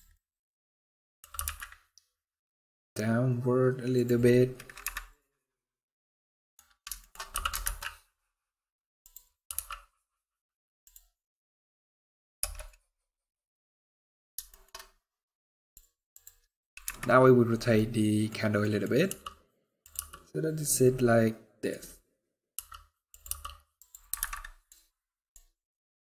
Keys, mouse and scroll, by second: 1.0 g, 4.5 KP_Decimal, 5.2 middle click, 6.3 scroll down 1, 6.7 shift+middle click, 7.0 g, 9.2 r, 11.1 middle click, 12.1 KP_0, 14.2 shift+middle click, 14.5 middle click, 15.3 click, 15.8 click, 16.6 KP_Decimal, 17.5 middle click, 18.3 middle click, 18.8 r, 20.6 middle click, 21.5 middle click, 21.9 scroll down 1, 22.2 r, 23.0 g, 24.0 alt+a, 24.0 alt+middle click, 24.4 alt+middle click, 24.5 scroll down 2, 24.7 scroll up 1, 24.7 middle click, 25.0 scroll down 3, 25.9 click.